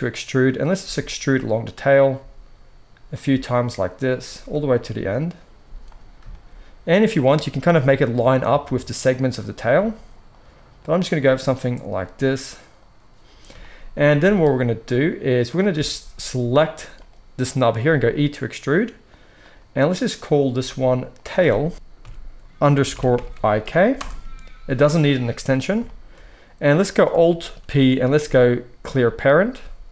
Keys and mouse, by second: 0.7 e, 2.1 e, 3.2 e, 4.3 e, 5.5 z, 7.1 click, 7.2-9.5 middle drag, 7.5 g, 8.5 g, 9.5 click, 9.6-10.7 middle drag, 9.6 g, 10.7 click, 11.1-12.7 middle drag, 11.1 g, 12.7 click, 12.8-15.3 middle drag, 14.1 z, 15.3 click, 15.4-16.8 shift+middle drag, 16.8 click, 17.0-19.3 middle drag, 17.8 e, 19.3 click, 19.4-21.1 middle drag, 21.1-29.9 drag, 27.6 alt+p, 29.5 g.